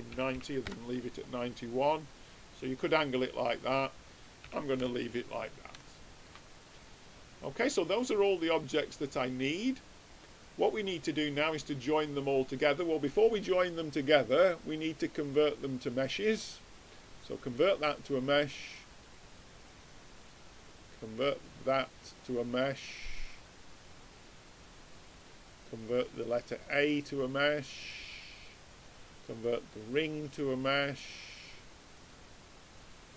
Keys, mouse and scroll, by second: 1.4-3.2 middle drag, 3.6-5.3 drag, 5.5-5.8 scroll down 1, 5.8-8.4 middle drag, 10.7-12.6 drag, 13.0-14.8 drag, 18.0-20.7 drag, 26.0-27.7 drag, 30.3 click, 31.4-33.1 drag.